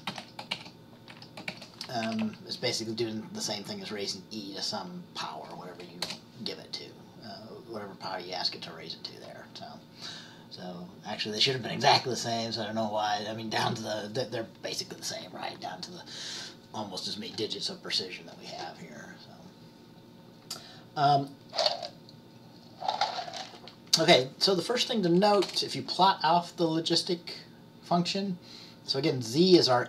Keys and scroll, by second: 0.0-2.7 typing.